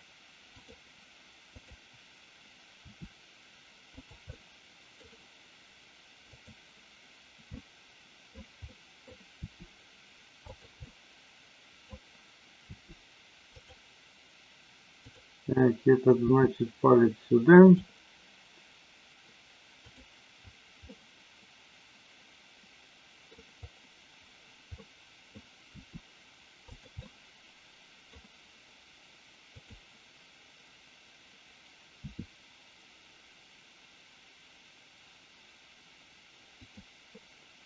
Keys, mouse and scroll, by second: 0.5 click, 1.6-2.1 drag, 2.8 r, 3.9 click, 4.3 middle click, 6.3 click, 7.5-8.3 middle drag, 8.7 middle click, 9.3 r, 10.8-11.8 middle drag, 12.7 r, 13.4 click, 16.2 r, 17.7 click, 19.7-20.3 drag, 20.9-23.2 middle drag, 24.7-25.3 middle drag, 25.7 r, 27.0-28.1 middle drag, 29.5 click, 32.0 r, 36.6 click.